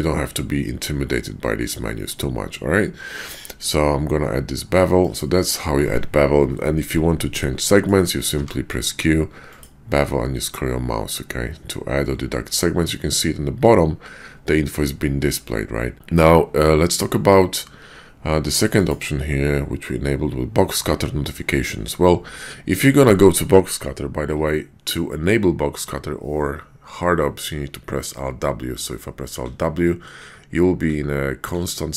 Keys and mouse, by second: 7.6 click, 8.3 q, 28.6 alt+w, 29.4 alt+w, 30.2 alt+w, 30.9 alt+w, 31.5 alt+w.